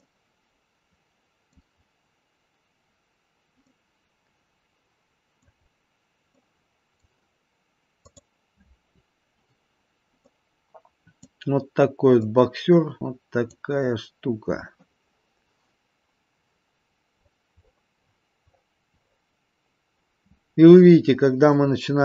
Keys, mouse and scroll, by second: 0.0 middle click, 1.8 scroll up 2, 2.6-3.2 scroll down 2, 3.6 middle click, 5.7-6.3 scroll up 2, 6.3 middle click, 8.5 click, 9.9 scroll down 1, 10.3 middle click, 12.1 middle click, 13.0 middle click, 13.8-15.2 scroll up 2, 16.5-17.1 scroll up 3, 17.1-17.5 scroll down 1, 17.9-19.2 scroll up 14.